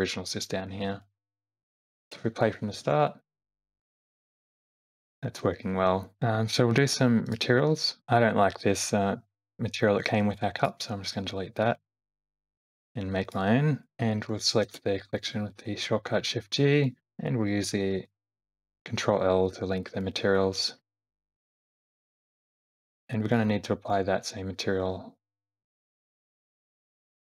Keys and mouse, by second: 1.1 shift+middle click, 2.4 space, 2.9 shift+Left, 7.3 click, 10.6 click, 11.7 click, 13.3 click, 14.8 shift+g, 18.4 ctrl+l, 21.0-23.4 drag, 23.9 click, 25.9 click.